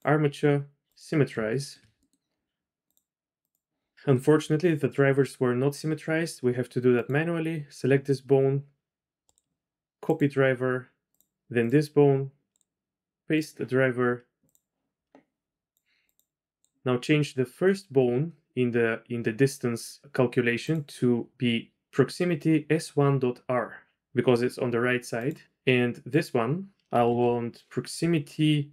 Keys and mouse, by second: 1.6 shift+middle click, 2.0 click, 2.8 click, 3.1 right click, 9.3 click, 11.1 click, 12.5 click, 14.4 click, 16.1 click, 20.7-25.3 drag, 26.1 click.